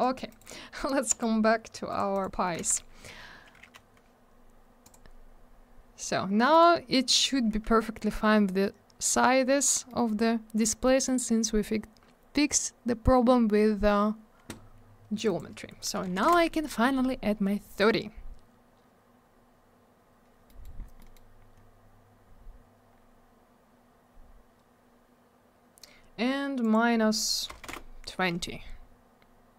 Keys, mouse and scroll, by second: 0.2 right click, 0.3 right click, 1.0 right click, 1.1 right click, 1.9 click, 1.9 click, 2.1 right click, 2.2 double right click, 4.9 click, 4.9 click, 6.5 right click, 6.6 right click, 7.1 right click, 7.2 right click, 7.8 scroll up 1, 9.9 middle click, 10.1 middle click, 10.9 middle click, 12.0 scroll up 1, 13.5-14.1 scroll down 1, 15.2 click, 15.3 click, 15.3 click, 15.4 double click, 16.1 3, 16.3 Return, 20.5 middle click, 20.8-21.1 scroll down 2, 21.0 middle click, 21.1 middle click, 21.6 scroll up 1, 26.6 click, 26.7 click, 27.5 BackSpace, 27.7 2, 27.7 Return.